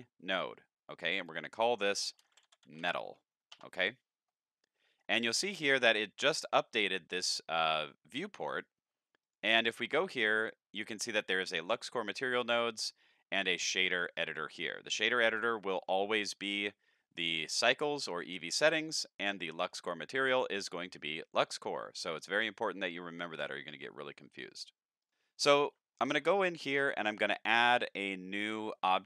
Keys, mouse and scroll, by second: 1.2 click, 2.2 m, 2.7 a, 3.5 Return, 4.8 middle click, 5.3-5.9 scroll up 5, 9.2 click, 25.0 click, 25.4-25.8 scroll up 5, 25.9 shift+middle drag, 26.3 middle click, 26.9 shift+a, 28.5 click.